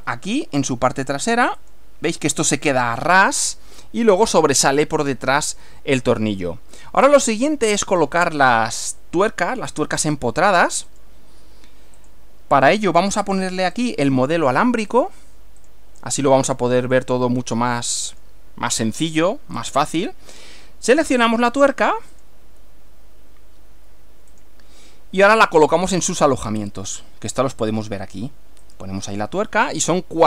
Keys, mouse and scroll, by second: 1.6 click, 3.2-4.4 middle drag, 5.5-6.6 middle drag, 6.7-7.6 middle drag, 8.3 shift+middle click, 10.1 scroll up 2, 10.9 click, 12.1 click, 12.7 right click, 13.9 click, 15.0 click, 15.6 click, 16.9 click, 17.5-18.5 middle drag, 19.5-20.1 scroll up 4, 21.1 click, 22.1 click, 24.3 click, 25.5-26.9 middle drag, 28.7 click, 29.6-30.2 middle drag.